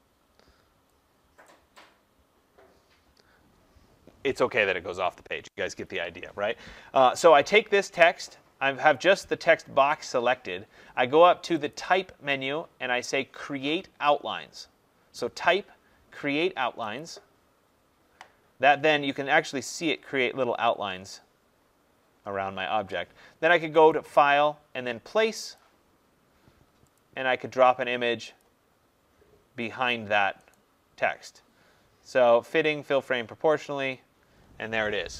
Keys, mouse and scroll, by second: 1.4 click, 11.6 click, 16.9 click, 19.0 click, 23.8 click, 25.5 click, 26.9 click, 30.4 right click, 33.6 click.